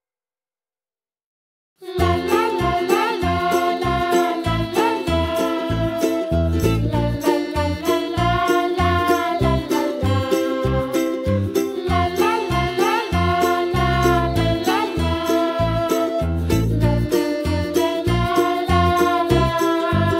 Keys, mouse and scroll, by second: 1.0-1.4 middle drag, 1.4 scroll up 1, 1.6 scroll down 2, 1.8-2.3 middle drag, 2.3 s, 4.1-4.8 middle drag, 4.8 click, 5.1 click, 5.7 Tab, 6.3 ctrl+r, 10.8 alt+shift+click, 11.0 alt+shift+click, 11.4 alt+shift+click, 11.5 alt+shift+click, 11.9 click, 12.2 click, 12.7 alt+shift+click, 13.3 alt+shift+click, 13.4 alt+shift+click, 13.7 alt+shift+click, 14.5 s, 17.1 click, 18.4 click, 18.9 alt+click, 19.4 alt+shift+click, 20.0 s.